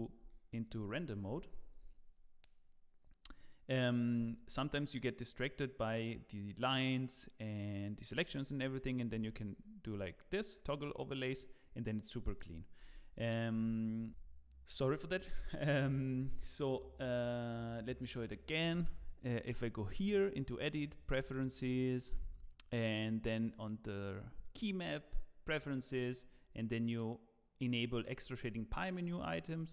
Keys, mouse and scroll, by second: 0.2 shift+middle click, 1.3 z, 9.1 z, 12.8 z, 20.2 click.